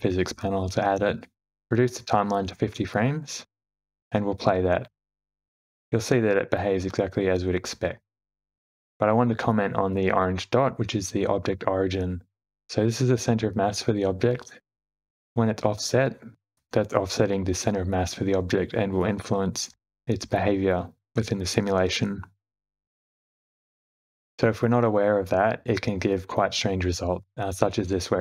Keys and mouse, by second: 1.9 click, 5.4 click, 6.2 space, 9.7 space, 10.0 shift+Left, 11.3 click, 16.4 g, 18.6 space, 20.8 space, 21.1 shift+Left, 22.5 g, 24.0 shift+middle click, 24.7 shift+middle click, 25.0-25.7 middle drag, 26.5 space.